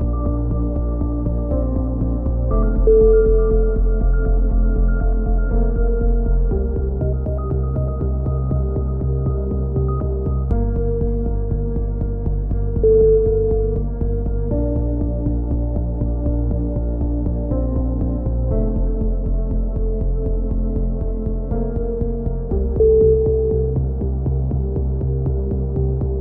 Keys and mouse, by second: 0.0 a, 0.3-1.4 drag, 1.6 b, 2.5 e, 3.1-4.3 drag, 9.1 c, 9.8-10.9 drag, 10.1 s, 11.9 c, 13.0 click, 17.5-18.5 drag, 18.0 b, 20.3 KP_7, 20.8-22.1 middle drag.